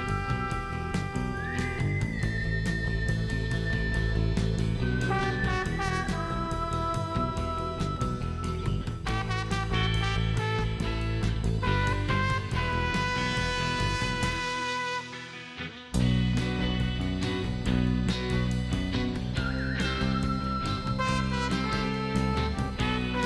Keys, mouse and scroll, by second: 0.0 click, 0.5 click, 1.1 middle click, 2.0 shift+middle click, 2.8 shift+right click, 5.5 shift+right click, 12.0 click, 13.0 scroll down 1, 13.2 middle click, 13.6 scroll down 2, 14.0 shift+right click, 16.9 shift+middle click, 18.1 scroll down 1, 19.3 shift+right click, 21.7 shift+right click, 22.8 shift+right click.